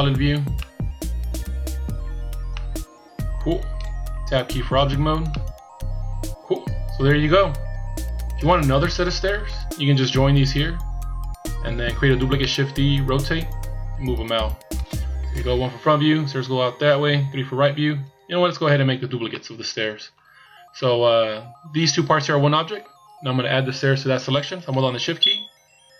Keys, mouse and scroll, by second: 0.6 middle click, 2.2 scroll down 3, 2.5 middle click, 4.8 Tab, 5.3 middle click, 10.6-12.4 scroll down 1, 12.4 middle click, 12.4 scroll down 1, 15.4 KP_1, 17.1 KP_3, 18.1 KP_1, 19.3 middle click, 20.6 scroll up 2.